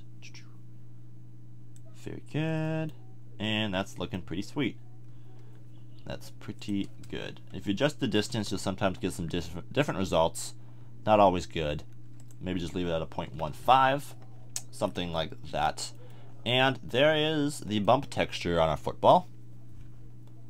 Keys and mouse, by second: 4.0 middle click, 8.5-9.9 middle drag, 11.6 middle click, 14.8-18.2 middle drag.